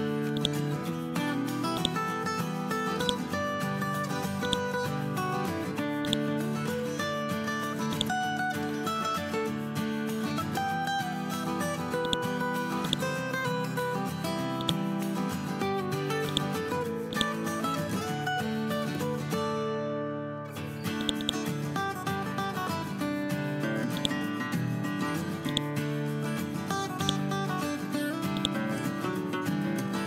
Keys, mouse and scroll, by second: 12.0-18.9 drag, 23.9-26.0 drag.